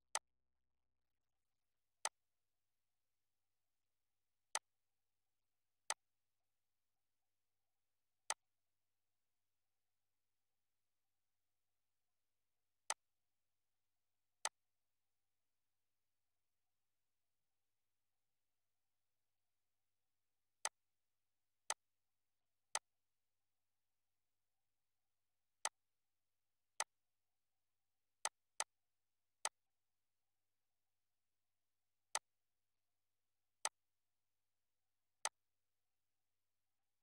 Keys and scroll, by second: 16.8 Down.